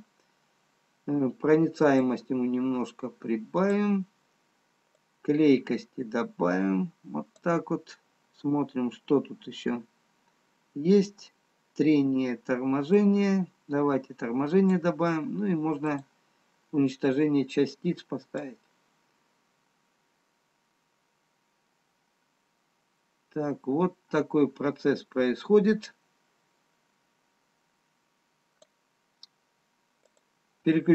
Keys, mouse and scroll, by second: 2.1 click, 10.0-11.8 scroll down 4, 13.5 click, 16.5 click, 18.6 click.